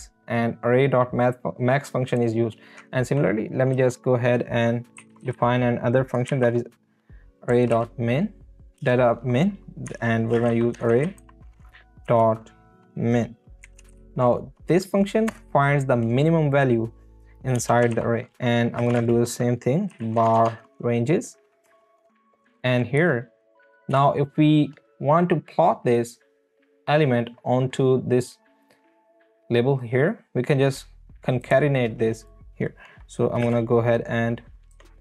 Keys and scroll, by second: 3.7 Return, 4.7-6.3 typing, 7.5 i, 7.7 n, 8.8 space, 10.2-11.7 typing, 13.4-14.4 typing, 15.3 Return, 17.6-20.8 typing, 21.6 Return, 23.0 Right, 23.9 Down, 33.4 space, 34.7 BackSpace.